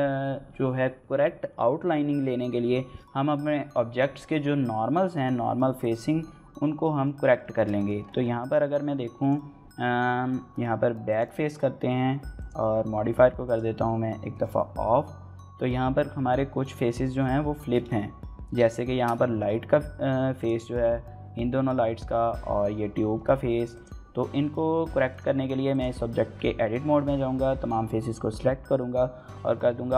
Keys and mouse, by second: 6.5-18.4 middle drag, 18.5-22.7 shift+middle drag.